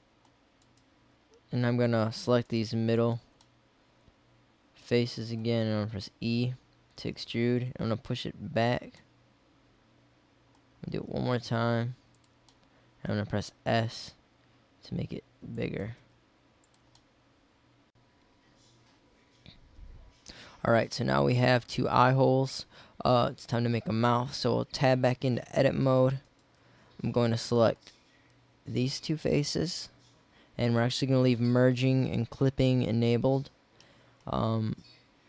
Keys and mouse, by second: 3.7 middle click, 6.2 w, 7.1 e, 9.0 middle click, 10.1 middle click, 11.0 e, 13.4 s, 16.0 s, 16.7 click, 17.0 middle click, 24.8 Tab.